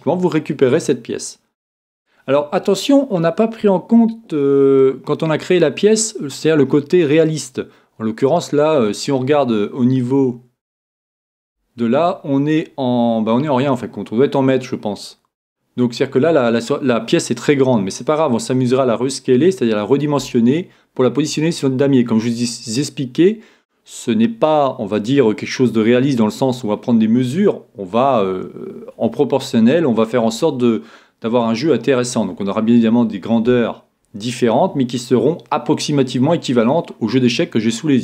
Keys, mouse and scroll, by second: 0.0 click, 0.0-1.5 middle drag, 1.9-3.5 scroll up 1, 3.5 scroll up 1, 3.6-5.3 scroll down 1, 5.3-10.9 scroll down 1, 10.9 click, 16.6-20.0 middle drag, 36.9-37.5 scroll down 1, 37.5-38.0 middle drag.